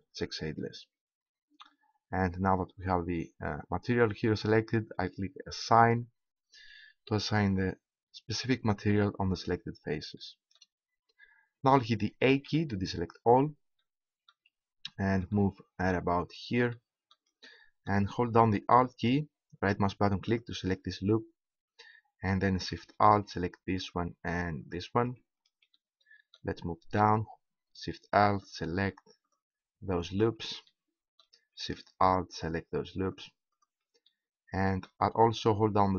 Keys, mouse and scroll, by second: 2.2-4.9 middle drag, 5.8-7.6 drag, 10.2 middle click, 11.2 middle click, 12.5 a, 28.3-31.9 right drag, 30.8 click, 32.3-35.9 right drag, 34.1-35.9 drag.